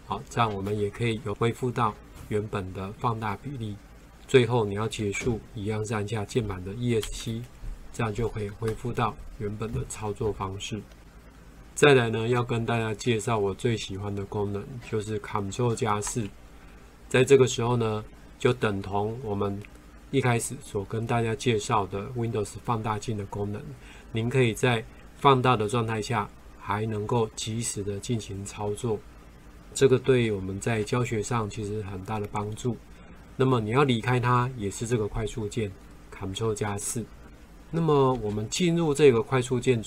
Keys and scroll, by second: 16.1 ctrl+4, 30.9 ctrl+4, 38.8 ctrl+4.